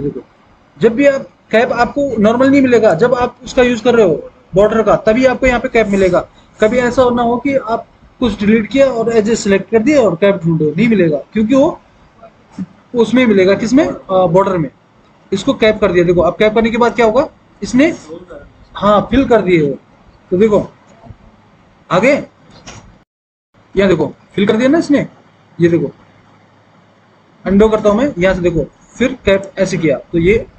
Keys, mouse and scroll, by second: 21.0 F4, 21.3 F3, 23.6 F4, 24.4 F3, 24.5 F4, 27.6 ctrl+z.